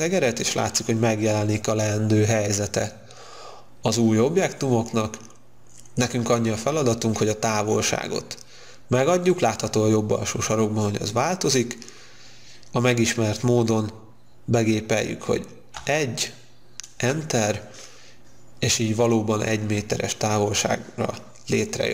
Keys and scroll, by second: 16.1 1, 17.0 Return.